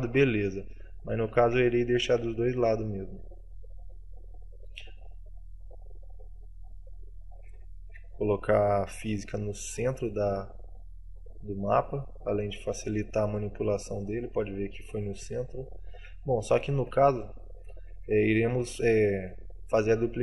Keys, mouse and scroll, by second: 2.3 t, 5.9 click, 16.0 middle click, 16.8 t, 17.2 middle click, 17.8 shift+middle click, 18.4 middle click, 19.0 scroll down 3, 19.4 middle click.